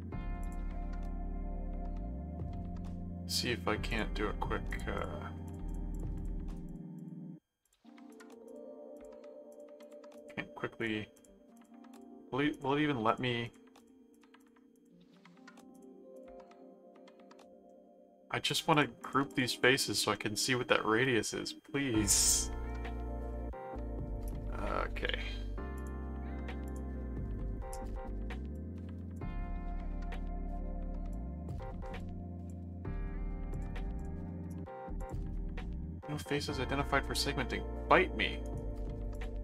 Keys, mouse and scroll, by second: 0.4 click, 3.9 click, 4.7-7.5 drag, 7.6-10.7 drag, 10.8-12.5 drag, 12.5-15.3 drag, 15.7 click, 16.5 middle click, 17.1 middle click, 18.5-20.1 drag, 20.1 middle click, 22.6 middle click, 25.7 click, 26.6 click, 28.5 click, 29.6 middle click, 31.1 click, 32.0 click, 33.5 click, 35.0 click, 38.4 right click, 39.1 click.